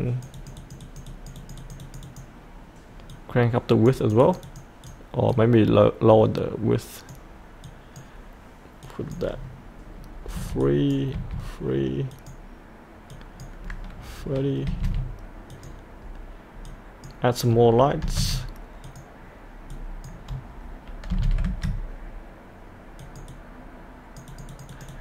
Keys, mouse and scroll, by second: 10.3 KP_3, 10.6 click, 11.1 KP_3, 12.1 click, 14.7 KP_3, 15.5-17.8 drag, 18.0 KP_2, 18.8-20.9 drag, 21.1 KP_2, 23.0-25.0 drag.